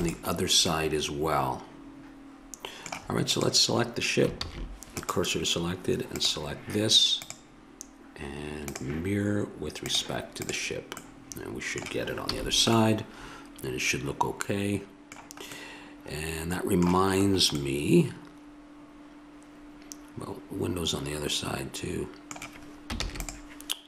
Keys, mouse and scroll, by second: 3.3-5.0 drag, 4.3 shift+s, 6.3-11.0 drag, 11.0 middle click, 12.3 a, 14.6-15.6 middle drag, 17.3 middle click, 19.4 middle click, 23.0 ctrl+s.